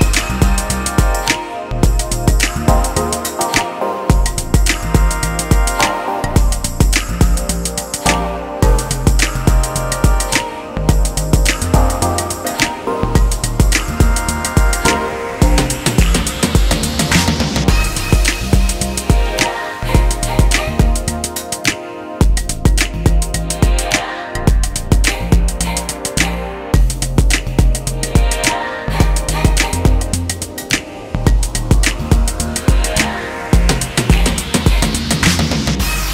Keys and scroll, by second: 18.5 shift+F8, 27.4 shift+F6, 31.4 Page_Up, 35.8 BackSpace, 36.0 BackSpace.